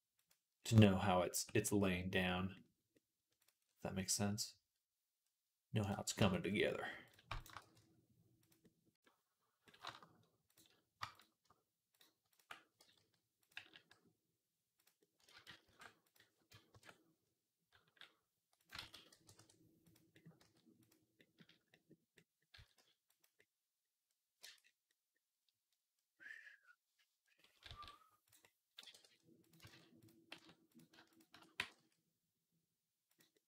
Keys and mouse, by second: 0.0-13.4 right drag, 1.2 Tab, 1.5 z, 3.2 click, 3.2 middle click, 5.6 click, 5.6 middle click, 6.0 Tab, 7.2 shift+click, 7.2 shift+middle click, 7.4 g, 10.3 click, 10.3 middle click, 12.1 ctrl+click, 12.1 ctrl+middle click, 12.6 g, 13.4-17.5 drag, 13.4 g, 15.3 ctrl+z, 15.6 ctrl+z, 16.5 ctrl+KP_Add, 17.5 g, 18.6 ctrl+z, 18.9 g, 20.2-22.0 drag, 20.2 s, 22.4 s, 24.2 Tab, 27.4-32.5 right drag, 27.5 s, 28.6 g, 29.5 ctrl+z, 29.8 click, 30.2 Tab, 30.9 alt+shift+click, 31.4 g.